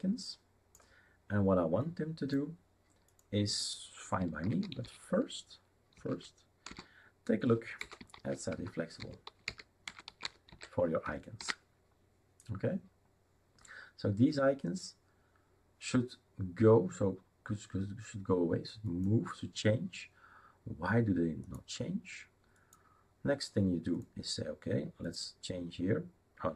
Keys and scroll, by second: 4.2-11.0 typing, 11.4 ctrl+s.